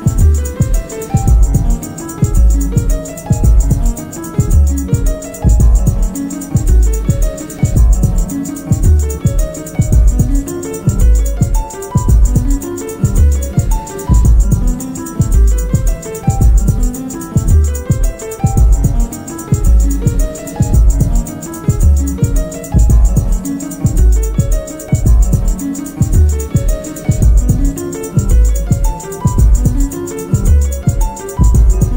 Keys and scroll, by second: 11.7 3, 13.1 ], 15.3 ,, 16.6 ctrl+z, 16.9 ], 17.2 ], 18.1 4, 18.5 3, 20.2 4, 22.2 F1, 28.9 1, 30.6 F1, 30.9 F2, 31.7 4.